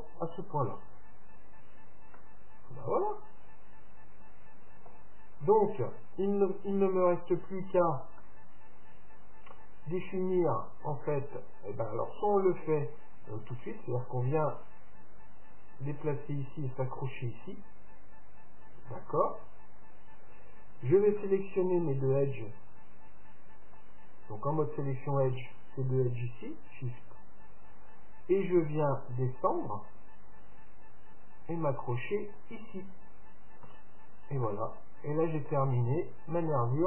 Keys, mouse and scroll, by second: 2.2-4.2 middle drag, 8.2-10.2 middle drag, 14.6-16.6 drag, 21.2-23.0 middle drag, 23.7-25.5 drag, 25.1-28.8 right drag, 28.8-30.5 drag, 33.7 Tab, 34.1-36.8 middle drag.